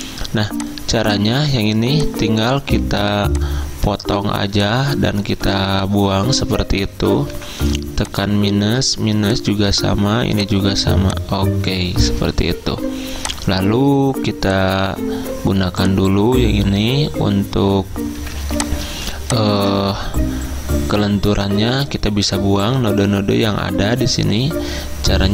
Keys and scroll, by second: 5.5 Delete, 7.4 -, 12.5 -, 18.2 z, 19.9 ctrl+z.